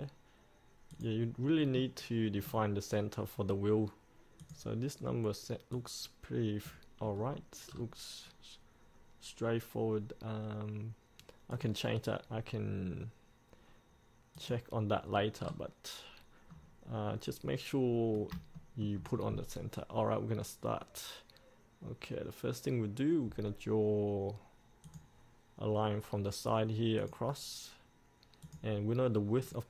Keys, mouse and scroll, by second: 1.8 middle click, 2.6-4.6 scroll down 1, 4.6-7.3 drag, 7.3-7.9 scroll up 1, 7.9-11.7 scroll down 1, 11.7-12.8 drag, 15.3 scroll up 1, 15.6-16.7 scroll down 1, 18.8 shift+middle click, 19.4-25.0 scroll down 1, 25.0 click.